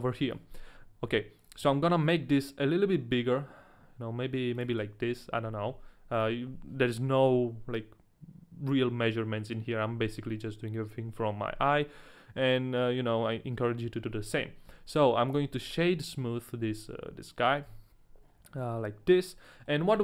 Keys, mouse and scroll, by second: 1.1 g, 1.4 click, 1.6 s, 4.7 ctrl+click, 5.4 ctrl+a, 5.4 ctrl+click, 14.7 w, 15.7-17.4 scroll up 3, 16.1 shift+middle click, 16.1 w, 16.2 middle click, 17.4 KP_Decimal, 17.7 KP_1, 18.2-18.6 scroll down 2, 18.9 shift+middle click, 18.9 scroll up 1, 18.9 KP_Decimal, 18.9 KP_1, 19.5 middle click.